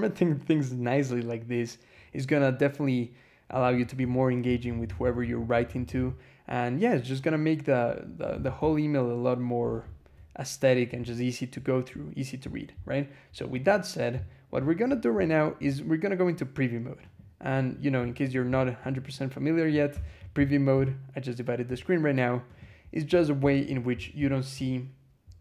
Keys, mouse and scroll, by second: 3.5 click, 3.9 Escape, 4.3-6.1 typing, 8.2 shift+v, 8.4 shift+j, 11.9 scroll up 2, 12.7 scroll down 2, 13.4 click, 14.0 scroll up 2, 16.9 click, 18.1 click, 18.7 click, 19.8 alt+\, 22.3 click, 24.1 scroll down 2, 25.1-25.4 scroll up 4.